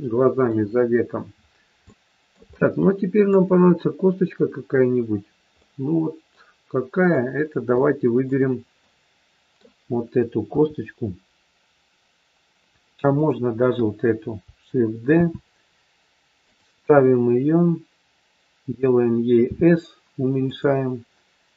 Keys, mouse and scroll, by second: 0.9 scroll down 2, 1.7 scroll down 2, 1.8 shift+middle click, 2.0 shift+middle click, 2.5 middle click, 6.8 click, 7.7 shift+middle click, 8.7 middle click, 10.4 KP_3, 13.1 click, 15.1 shift+d, 19.5 s.